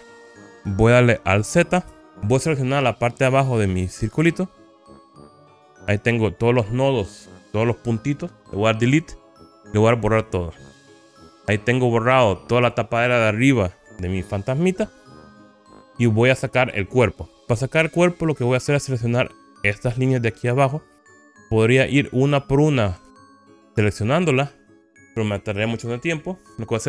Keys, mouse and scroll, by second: 2.0 alt+z, 3.8-5.8 drag, 8.9 Delete, 11.0 middle click, 11.5-12.9 middle drag, 15.6 middle click, 18.5 middle click, 21.1-21.5 scroll up 2, 22.4 click, 23.1 click.